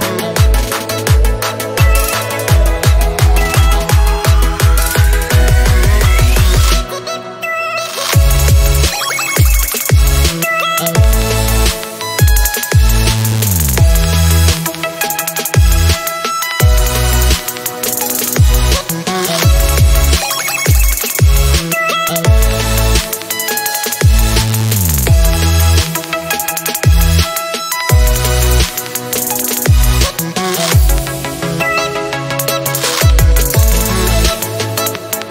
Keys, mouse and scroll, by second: 1.5-2.4 scroll down 6, 2.4-5.4 scroll up 3, 5.4 g, 8.2 shift+a, 12.0 click, 13.2-16.3 drag, 17.2 scroll up 2, 18.1 click, 20.4-23.4 drag, 30.8 click, 32.3 click.